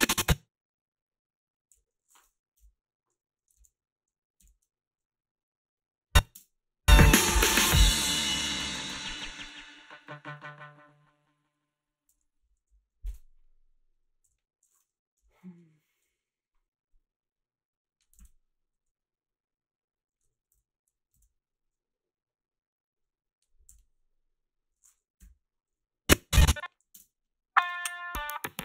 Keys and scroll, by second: 1.7 g, 2.6 Delete, 3.6 ctrl+z, 6.4 space, 12.1 space, 12.8 Up, 14.3 g, 15.2 Delete, 16.0 \, 18.2 ctrl+s, 23.7 h, 26.8 a, 26.9 space.